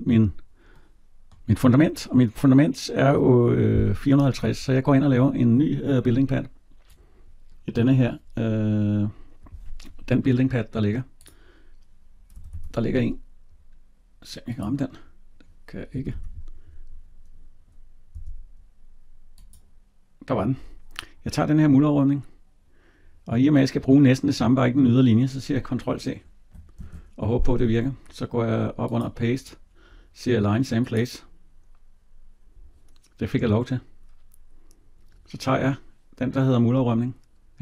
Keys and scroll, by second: 12.2 Escape, 18.0 Tab, 26.6 ctrl+c.